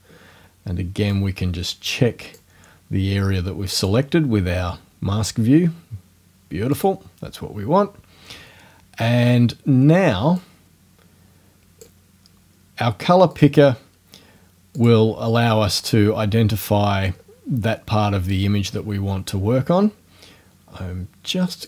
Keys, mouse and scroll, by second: 1.2-2.6 drag, 3.8 click, 6.8 click, 10.4-12.0 drag, 13.3 click, 14.8 click, 16.6-17.4 scroll up 4, 18.7 scroll up 2, 21.5 click.